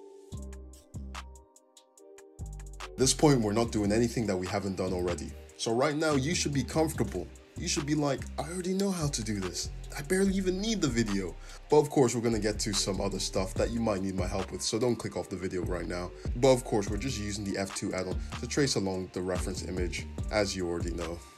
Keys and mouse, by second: 3.3 `, 4.3 f, 6.6-9.5 shift+middle drag, 7.4 f, 11.0 shift+click, 11.9 click, 12.6 f, 13.2-15.0 shift+middle drag, 15.0 click, 15.1 shift+middle click, 15.5 shift+click, 15.6-19.2 shift+middle drag, 16.6 g, 18.3 `, 19.1 Tab, 19.4 `, 19.8 click, 20.1 Tab.